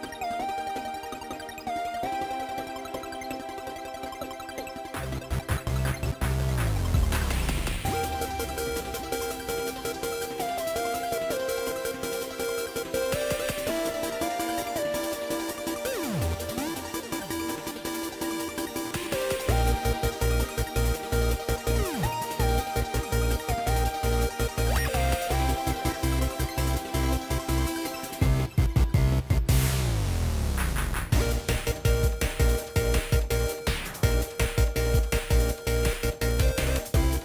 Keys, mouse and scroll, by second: 6.6 right click, 9.2 right click, 17.8 shift+click, 19.5 ctrl+j, 21.5 ctrl+click, 30.8 shift+click, 33.6 ctrl+a.